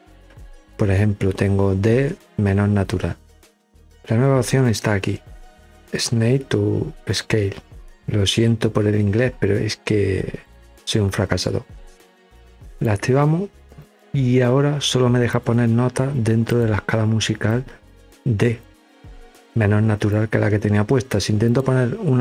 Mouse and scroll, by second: 12.1 click, 14.9 click, 16.1 click, 17.1-18.2 drag, 19.7-20.7 drag, 21.0 click.